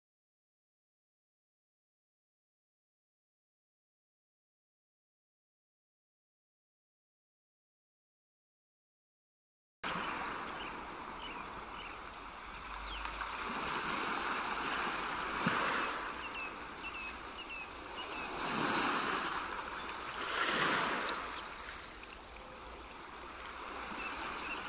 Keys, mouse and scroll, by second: 4.1 middle click, 7.3 ctrl+r, 12.8 middle click, 16.4 scroll down 1, 17.8 middle click, 17.8 scroll down 1, 18.6 shift+middle click, 19.3 scroll up 1, 20.3 ctrl+r.